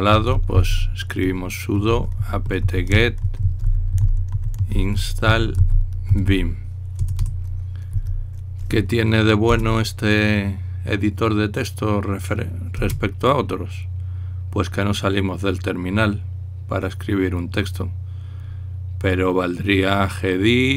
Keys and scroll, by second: 0.0-8.7 typing, 10.2 Return, 13.4 Return.